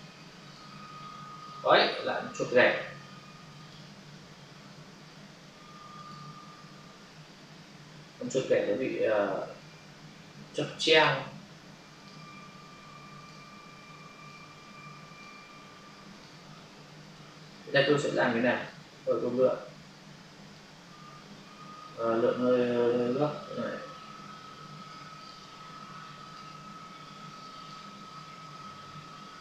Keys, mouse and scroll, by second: 0.4 click, 3.6 alt+click, 6.0 click, 8.4 Delete, 10.9 click, 14.2 click, 16.0 click, 18.5 click, 20.4 click, 22.1 Delete, 25.2 click, 27.5 click.